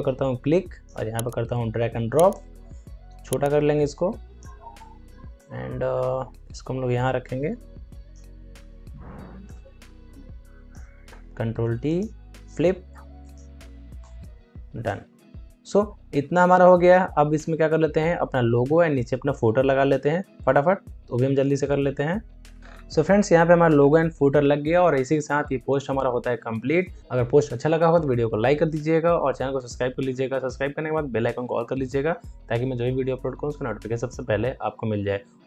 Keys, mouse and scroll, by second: 4.7 Return, 5.3-9.4 drag, 9.4-11.2 alt+drag, 11.2 ctrl+t, 11.8 right click, 13.1 click, 13.9 Return, 14.8 click, 22.6 alt+scroll down 1, 22.8 alt+scroll up 1, 23.7 scroll up 1.